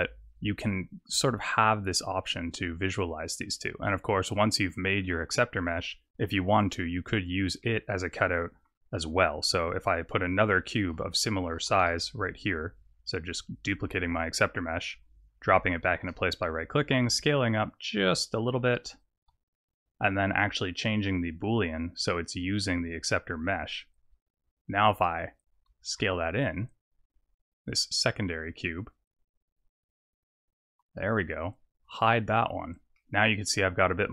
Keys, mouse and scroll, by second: 4.7 click, 7.0 click, 7.6 middle click, 8.9 scroll up 4, 9.4 middle click, 10.1 scroll down 4, 11.0 click, 12.4 shift+d, 15.8 s, 20.5 click, 21.5 click, 25.9 s, 32.1 click, 32.6 click, 32.9 middle click.